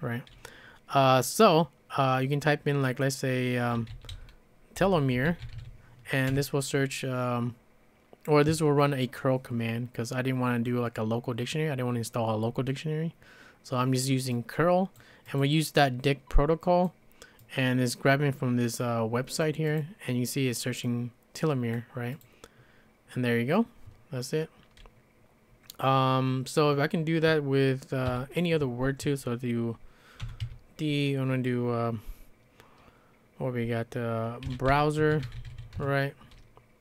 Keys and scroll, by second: 3.5-6.0 typing, 6.3 Return, 28.1 typing, 30.0-30.9 typing, 34.2-36.0 typing.